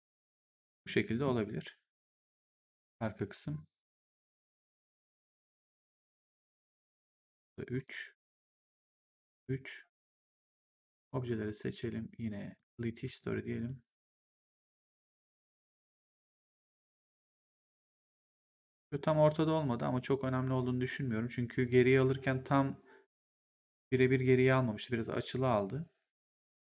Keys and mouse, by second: 6.7 click, 7.2 3, 7.7 click, 8.2 3, 8.8 click, 9.0 3, 9.3 click, 12.5 click, 18.7 click.